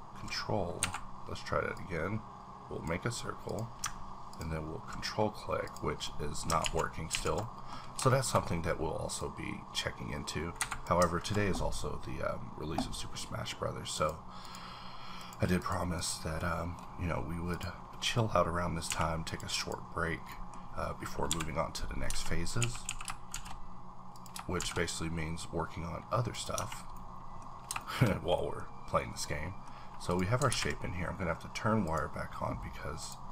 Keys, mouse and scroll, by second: 0.8 Escape, 1.7-4.3 drag, 5.6 ctrl+click, 6.0 middle click, 6.6 ctrl+z, 7.1 ctrl+z, 7.4 middle click, 7.8 scroll up 1, 8.1 shift+middle click, 9.2 click, 9.2-12.2 drag, 10.6 Escape, 12.2-13.9 scroll down 1, 13.9 click, 14.4 click, 15.2 click, 15.6 click, 15.9 click, 16.4-18.9 middle drag, 17.5 click, 18.9 h, 19.2 click, 19.6 click, 20.3 middle click, 21.3 KP_7, 22.1 Tab, 22.1-22.6 scroll up 2, 22.6 a, 22.8 a, 23.3 shift+d, 24.1 click, 24.6 shift+d, 26.3 click, 26.5 Tab, 26.7 scroll down 1, 26.9 middle click, 27.2 scroll down 1, 27.8 shift+middle click, 28.0 scroll down 1, 29.0-30.5 middle drag, 30.1 click, 30.1 click, 30.5 ctrl+`, 31.8 click, 33.0 click.